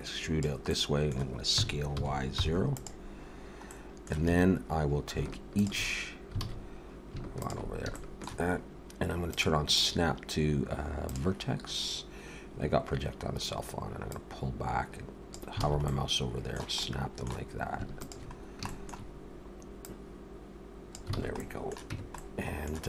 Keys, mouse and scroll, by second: 0.7 middle click, 1.6 s, 3.6 middle click, 4.3 alt+a, 5.5 alt+shift+click, 6.4 alt+a, 6.6-6.9 scroll up 3, 7.4 alt+shift+click, 7.9 shift+middle click, 9.3 click, 9.8 click, 14.1 click, 15.6 alt+a, 15.8 middle click, 18.0 alt+shift+click, 18.4 scroll down 2, 18.7 shift+middle click, 19.9 click, 21.2 alt+a, 21.4 middle click, 21.9 Tab, 22.2 middle click.